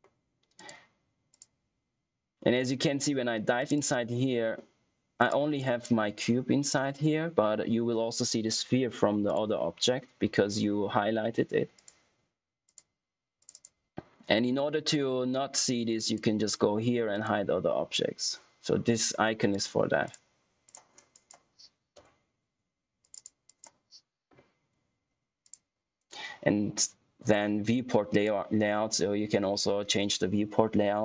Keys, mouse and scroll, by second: 3.5 click, 9.2 click, 11.7 click, 16.0 click, 19.4 click, 23.0 click, 25.4 click, 28.0 click.